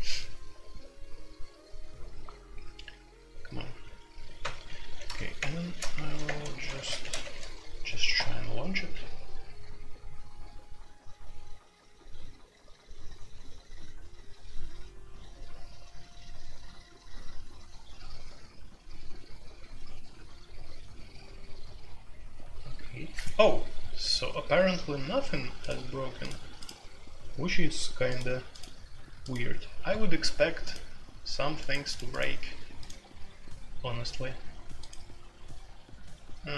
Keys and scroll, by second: 4.8-8.1 typing.